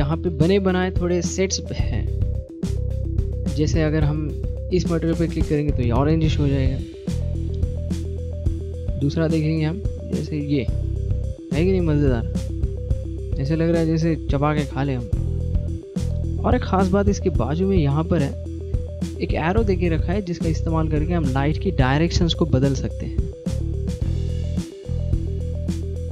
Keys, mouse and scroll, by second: 6.0 middle click, 9.2 click, 11.4 middle click, 24.0 click, 25.9 click.